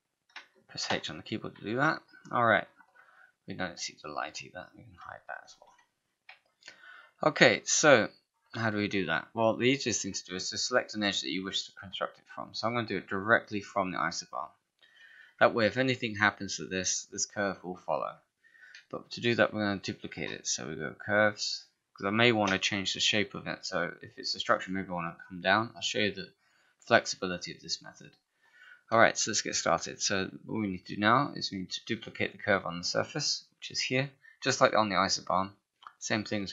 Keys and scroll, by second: 0.9 h, 5.6 ctrl+h, 18.8 space, 29.0 space.